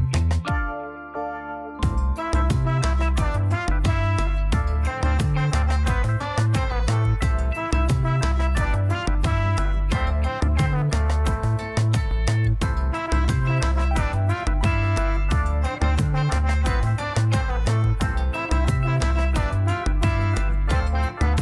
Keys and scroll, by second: 1.2 a, 1.4 n, 1.6 i, 1.7 m, 15.9 n.